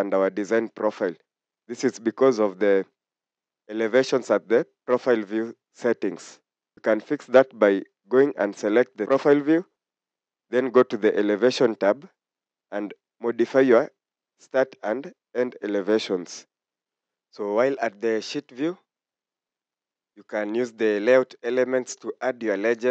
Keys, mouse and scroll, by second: 17.5 scroll down 1, 18.1 scroll up 1, 19.0 scroll down 1, 19.5 scroll up 1.